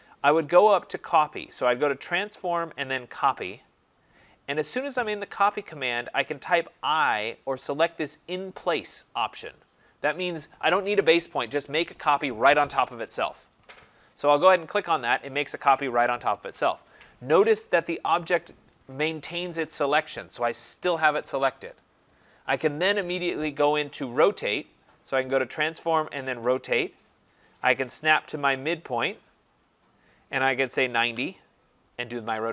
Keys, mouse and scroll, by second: 1.8 click, 3.3 click, 14.9 click, 24.7 click, 26.5 click, 29.7 click, 30.2-31.0 typing.